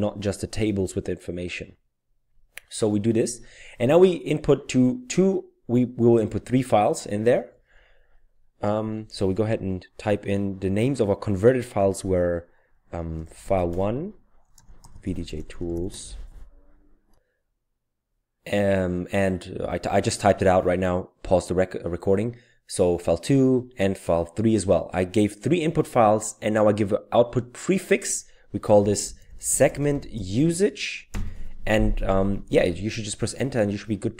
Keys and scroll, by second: 13.1-15.7 typing, 15.9 Tab, 28.6-31.0 typing.